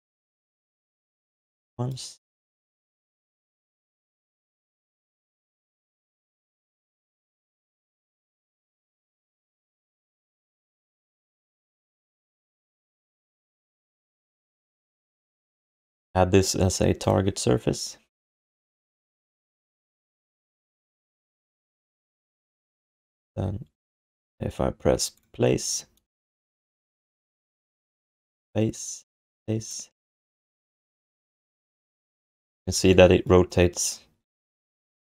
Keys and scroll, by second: 1.4 q, 2.5 alt+shift+d, 3.2 alt+q, 4.0 alt+q, 4.4-5.8 typing, 8.0 BackSpace, 9.6 BackSpace, 10.9 alt+shift+d, 11.1 ctrl+s, 13.9 alt+shift+d, 14.9 3, 32.5 f.